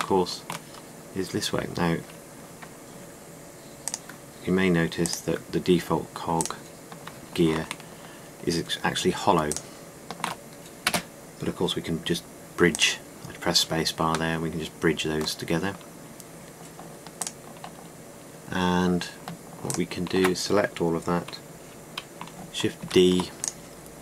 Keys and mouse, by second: 0.1 Tab, 11.5 space, 15.1 middle click, 23.5 shift+d.